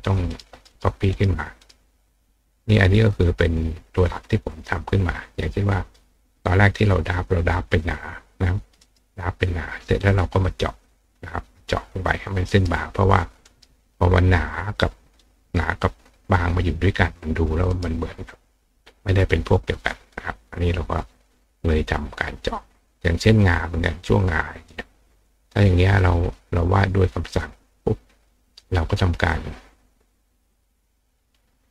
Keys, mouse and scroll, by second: 0.0 click, 0.3 right click, 0.7 right click, 1.1 right click, 1.6 right click, 4.9-5.9 drag, 8.8 right click, 9.8 click, 12.5 right click, 13.4 right click, 14.5 click, 17.7 right click, 19.5 click, 21.1-23.4 drag, 24.0 click, 27.3 click, 28.3 click, 30.5-31.7 drag.